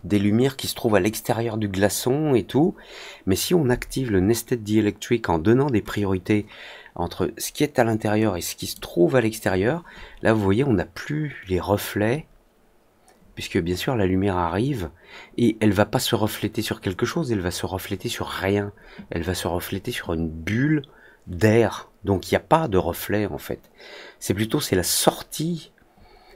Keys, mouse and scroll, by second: 8.5 click.